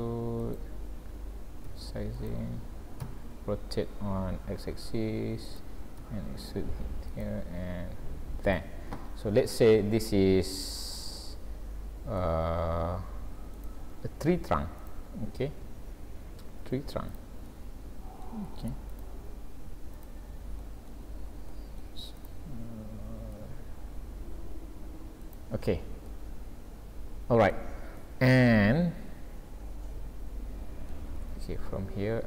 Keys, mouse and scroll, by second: 1.7 s, 3.1 r, 6.1 e, 7.7 s, 9.1-9.6 scroll down 5, 9.8 scroll up 2, 10.1 middle click, 13.6 click, 13.9-14.8 scroll up 2, 14.8 click, 16.6 s, 17.5 middle click, 18.9 click, 19.2 s, 20.6 middle click, 21.6 middle click, 22.2 click, 23.4 g, 25.6-26.1 scroll down 5, 26.1 middle click, 28.0 middle click, 31.1-31.6 scroll up 6, 32.1 scroll up 1.